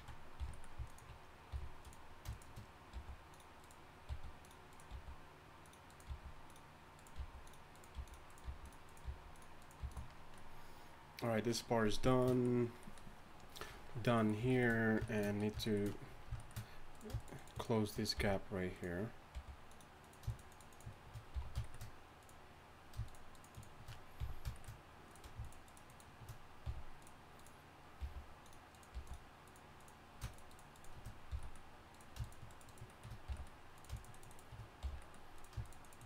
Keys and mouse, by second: 0.4 shift+right click, 0.4 f, 1.5 f, 2.9 g, 4.1 g, 4.9 g, 6.1 g, 7.1-9.8 typing, 18.2 f, 19.3 g, 19.7 shift+right click, 21.3 f, 24.2 f, 25.5 shift+right click, 26.6 f, 28.0 g, 28.9 g, 30.5 shift+right click, 31.3 f, 31.9 right click, 33.2 f, 34.8 f.